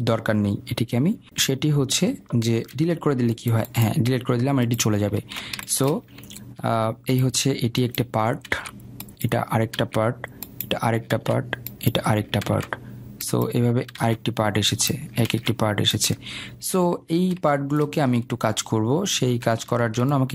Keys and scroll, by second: 3.3 Delete, 9.0 ctrl+z.